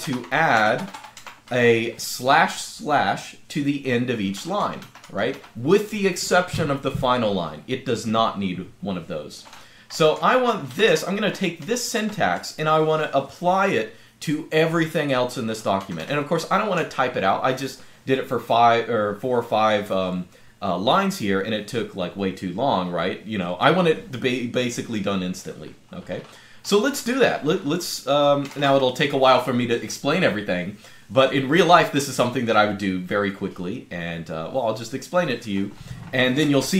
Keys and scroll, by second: 0.0-6.3 typing, 9.0-17.4 typing, 28.0-28.9 typing.